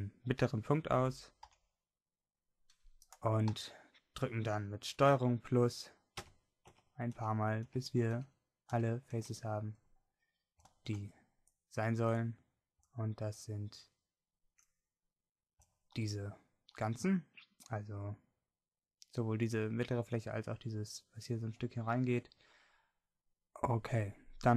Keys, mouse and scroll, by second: 3.1 b, 3.5 n, 6.3 ctrl+KP_Add, 6.7 ctrl+KP_Add, 7.1 ctrl+KP_Add, 7.7 ctrl+KP_Add, 8.2 ctrl+KP_Add, 8.9 ctrl+KP_Add, 10.1-11.1 middle drag, 15.7 middle click, 16.6-22.0 middle drag.